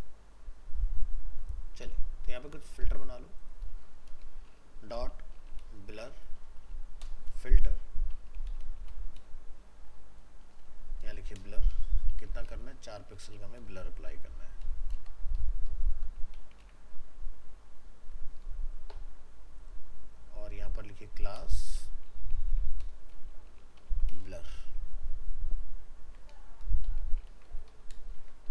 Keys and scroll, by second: 16.6 ctrl+s, 25.0 ctrl+s, 27.3 ctrl+c, 28.2 ctrl+v.